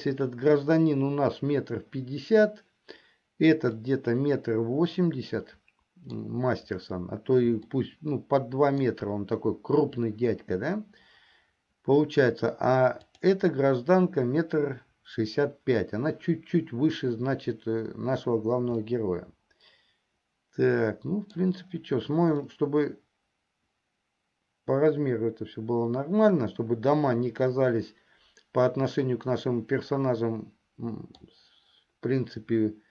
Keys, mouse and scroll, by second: 4.1-6.9 middle drag, 8.4-9.4 shift+middle drag, 13.3 click, 19.2-22.3 middle drag, 23.0-31.5 middle drag.